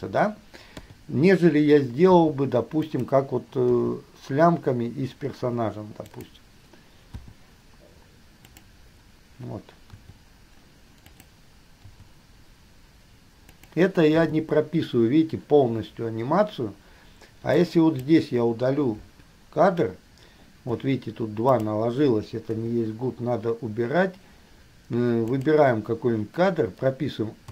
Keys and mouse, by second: 0.9 KP_3, 2.3 r, 3.9 g, 7.3 i, 8.7 click, 10.2 r, 12.2 g, 14.3 i, 17.7-18.2 drag, 19.3 Delete, 21.7 click, 22.9 Delete, 25.6 click.